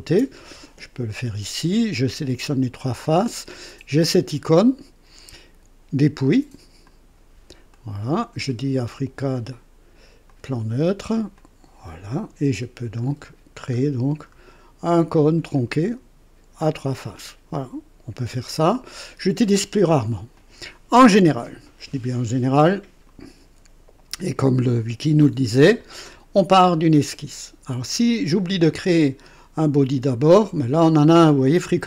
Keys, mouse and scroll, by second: 6.8 click, 7.7-9.2 drag, 10.2 click, 11.3 click, 12.9 scroll up 2, 13.7-14.0 scroll up 2, 14.2-14.6 scroll up 2, 15.5-17.2 drag, 18.5 click, 20.3 click, 20.9 Delete.